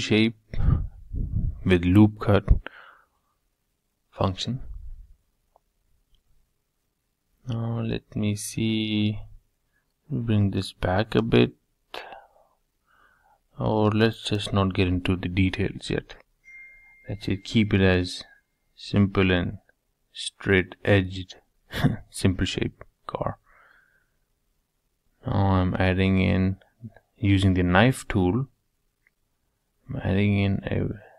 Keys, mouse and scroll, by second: 0.7-2.6 middle drag, 4.3-6.0 middle drag, 6.0 3, 6.4 click, 7.1 2, 7.5 click, 7.9 middle click, 8.5 g, 11.0-12.9 middle drag, 13.8 ctrl+z, 14.1-18.3 middle drag, 18.9 k, 19.6-20.6 scroll up 3, 20.6-22.6 shift+middle drag.